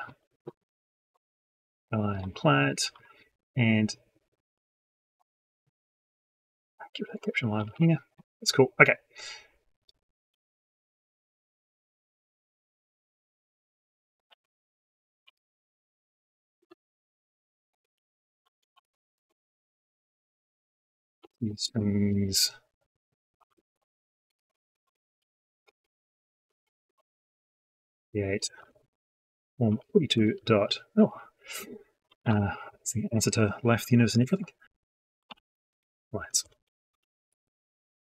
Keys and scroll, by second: 14.1 ctrl+c, 15.1 ctrl+v, 19.0 ctrl+space.